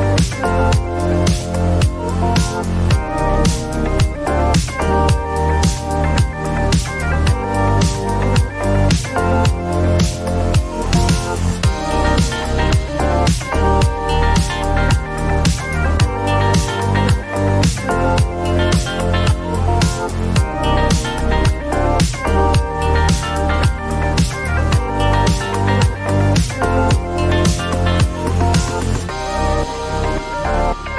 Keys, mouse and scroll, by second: 0.2 Return, 3.2 click, 8.6 click, 9.7 click, 11.3 click, 11.7-12.6 typing, 15.2 click, 18.0 click, 21.9 click, 24.2 s, 25.7 click, 26.0-26.7 typing, 29.5 Up, 29.7-30.9 Up.